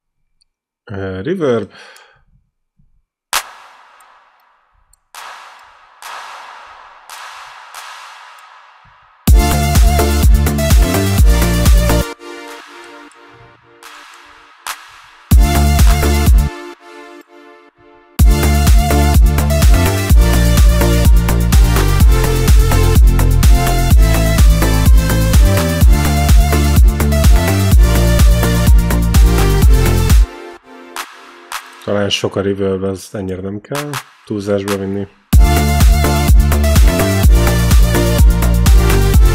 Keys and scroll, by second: 2.4 q, 5.0 q, 9.1 space, 9.5 q, 11.8 space, 12.2 q, 13.6 q, 15.1 space, 15.6 q, 16.2 space, 18.0 space, 30.0 space, 30.7 q, 33.6 q, 35.1 space.